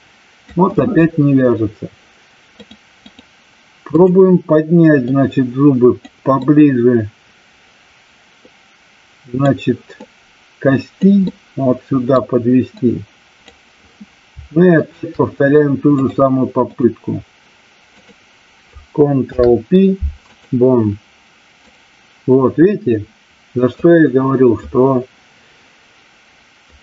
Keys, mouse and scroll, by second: 2.7-3.1 drag, 3.9 click, 5.0-6.0 drag, 6.4-9.4 middle drag, 10.0-11.0 drag, 11.3-12.1 middle drag, 12.8 click, 14.8 shift+click, 15.9-16.8 drag, 21.7-23.7 drag.